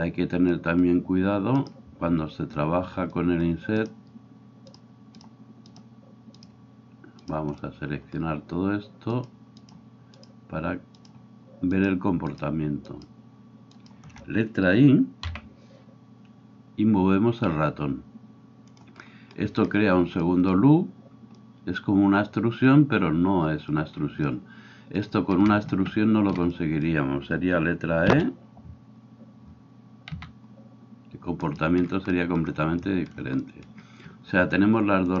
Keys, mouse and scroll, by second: 0.0-3.8 middle drag, 1.5 right click, 3.8-5.3 shift+right drag, 5.3 shift+middle click, 5.7 shift+right click, 6.4-9.7 shift+middle drag, 9.1 shift+right click, 9.7-12.8 shift+right drag, 12.8 shift+middle click, 12.9 shift+right click, 13.1 shift+middle click, 13.8 shift+right click, 14.0-35.2 shift+middle drag, 28.1 e.